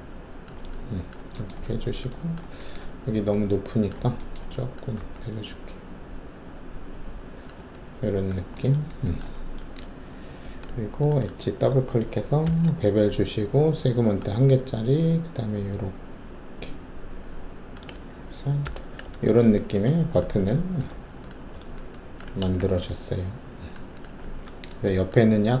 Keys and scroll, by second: 4.9 alt+w, 10.4 alt+2, 12.4 shift+b, 18.6 ctrl+5, 20.8 alt+`, 22.5 alt+shift+w.